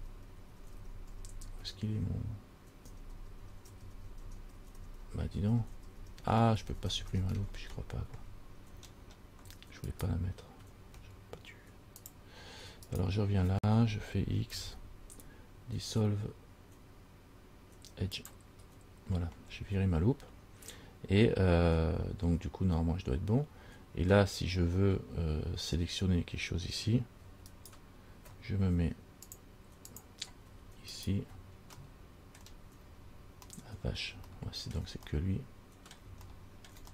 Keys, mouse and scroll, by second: 0.2 ctrl+z, 0.5 ctrl+z, 0.8 ctrl+z, 1.0 ctrl+z, 1.4 ctrl+z, 1.6 ctrl+z, 1.9 ctrl+z, 2.1 ctrl+z, 3.1 ctrl+z, 3.4 ctrl+z, 3.7 ctrl+z, 3.9 ctrl+z, 4.2 ctrl+z, 4.5 ctrl+z, 4.8 ctrl+z, 5.0 ctrl+z, 5.2 ctrl+z, 5.4 ctrl+z, 5.6 ctrl+z, 5.8 ctrl+z, 6.0 ctrl+z, 6.2 ctrl+z, 6.5 ctrl+z, 6.6 ctrl+z, 6.8 ctrl+z, 7.0 ctrl+z, 7.2 ctrl+z, 7.5 ctrl+z, 7.7-8.8 scroll down 5, 8.9-9.3 scroll up 6, 10.1 alt+right click, 12.3 click, 13.1 alt+right click, 14.7 x, 16.6 x, 19.5-20.2 scroll down 4, 27.7 alt+right click, 30.1 click, 31.1 alt+right click, 32.0 middle click, 33.0-33.4 scroll down 3, 34.5 shift+middle click, 35.3 middle click, 36.5 middle click.